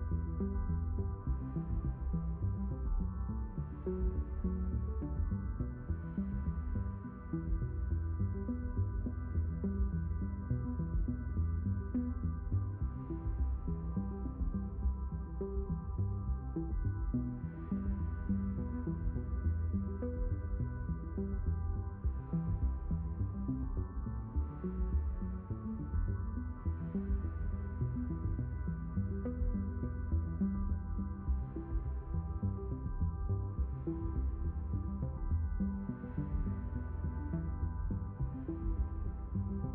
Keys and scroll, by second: 7.9 ctrl+z, 37.7 Return.